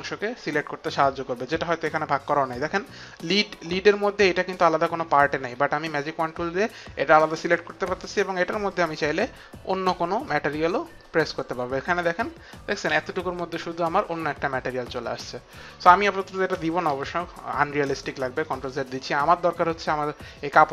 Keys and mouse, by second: 8.7 click, 16.8 ctrl+z, 19.4 click.